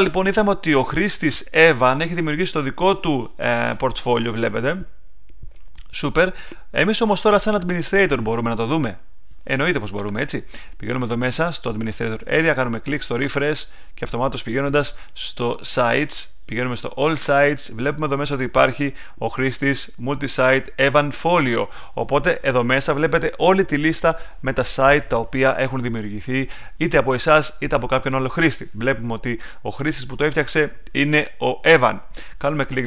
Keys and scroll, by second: 0.7 super+Tab, 6.5 super+Tab.